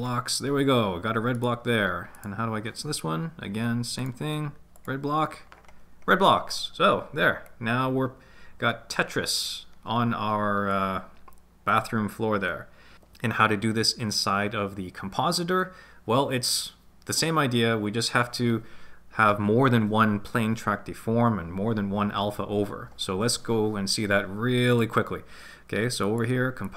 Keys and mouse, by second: 1.4 right click, 2.2 right click, 4.0-5.0 drag, 7.5-9.5 drag, 10.7-12.9 drag, 24.7 click.